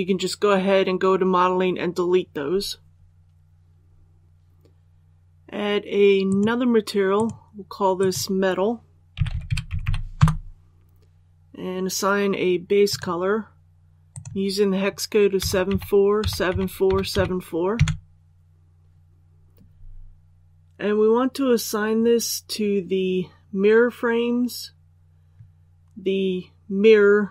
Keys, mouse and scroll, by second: 4.2 click, 9.0-9.6 typing, 10.0 Return, 12.7 click, 15.3 KP_7, 15.6 KP_4.